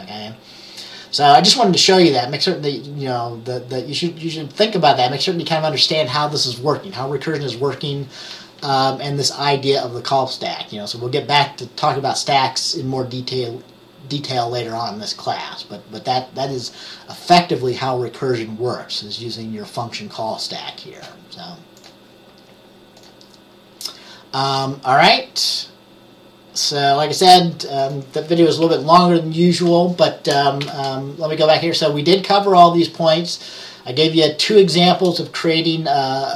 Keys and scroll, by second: 28.7 Page_Up, 30.7 Page_Down.